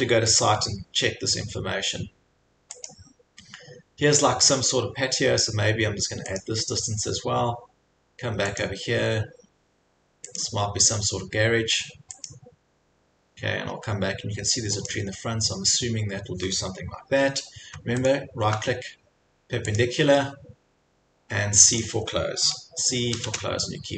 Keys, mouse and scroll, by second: 0.0 scroll, 0.4 click, 2.9 click, 6.4 click, 8.6 click, 11.4 click, 12.3 click, 14.9 click, 18.1 shift+right click.